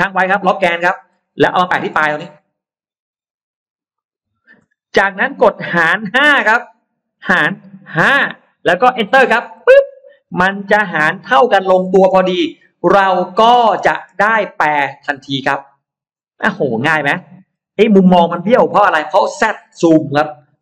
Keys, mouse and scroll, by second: 0.9-2.1 scroll up 3, 2.1 shift+middle click, 3.9 shift+click, 7.9 typing, 9.4 Return, 10.1 space, 10.3-10.9 scroll up 2, 11.2 middle click, 11.8-12.1 scroll up 2, 12.3-13.9 middle drag, 14.2-14.5 scroll up 1, 14.7-15.3 scroll up 1, 15.1 middle click, 15.5-15.9 scroll down 2, 16.2-17.0 scroll up 4.